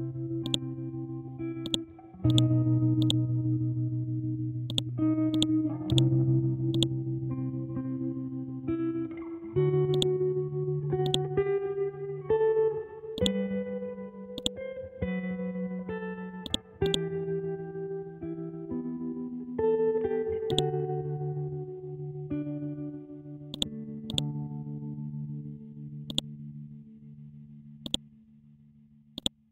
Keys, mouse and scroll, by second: 0.4-16.4 drag, 17.9-18.4 scroll down 1, 18.4 scroll up 1, 20.4 right click, 23.5 click, 27.1 ctrl+z, 27.8 click, 28.7 ctrl+z, 29.1 click.